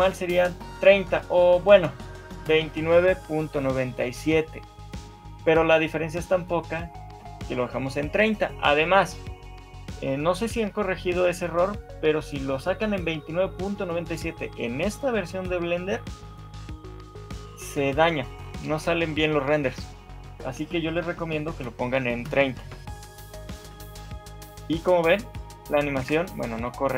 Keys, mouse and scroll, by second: 23.6 shift+middle click, 24.2 alt+a, 26.2 Escape.